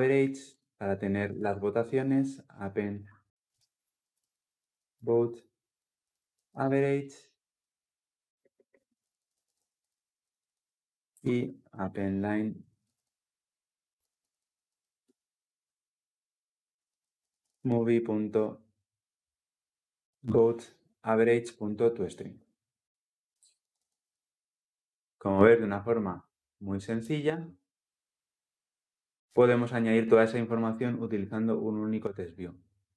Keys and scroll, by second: 0.3 Return, 14.8 Return, 20.9 Return, 23.5 ctrl+alt+l, 23.6 ctrl+alt+o, 26.8 ctrl+F10.